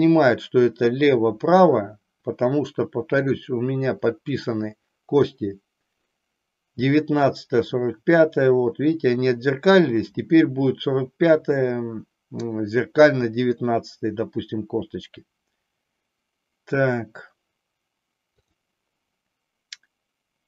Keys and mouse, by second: 3.1 click.